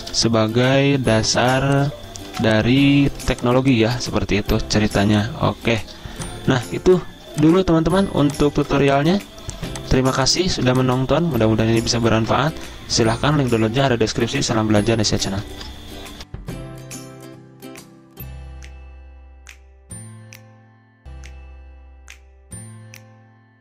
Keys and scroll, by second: 2.5-3.2 typing, 4.4 r, 5.3 r, 7.1 Escape, 7.3-10.0 typing, 11.2 v, 12.6 ctrl+g, 15.6-16.3 typing.